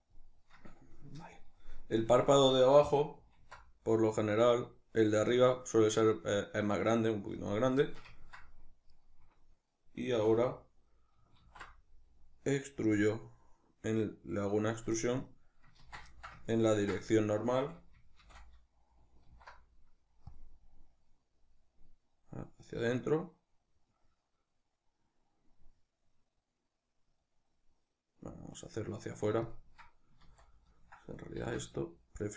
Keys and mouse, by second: 0.2 click, 3.4 alt+s, 7.5 click, 7.9-9.0 shift+middle drag, 9.0 right click, 10.2 a, 11.5 alt+e, 14.9 click, 15.0-18.3 middle drag, 15.9 ctrl+z, 17.6 a, 18.3 shift+n, 19.3 alt+e, 29.6 click, 30.3 ctrl+z, 31.4 alt+s.